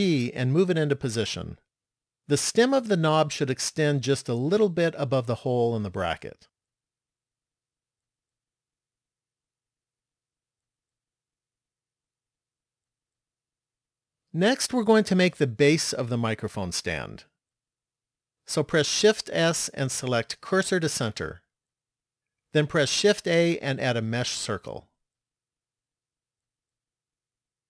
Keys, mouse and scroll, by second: 0.1 g, 7.3-8.9 scroll down 6, 8.9-10.3 scroll down 2, 11.0 shift+middle click, 19.4 shift+s, 23.3 shift+a.